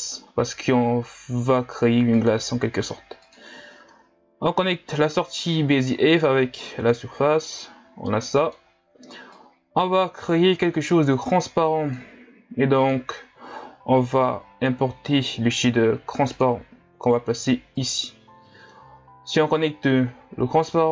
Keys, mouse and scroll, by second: 7.0 click.